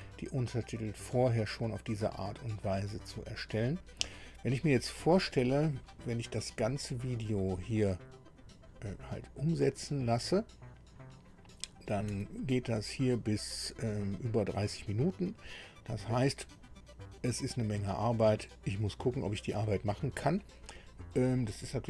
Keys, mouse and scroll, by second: 7.1-9.8 drag, 12.3 ctrl+scroll down 2, 13.9 click.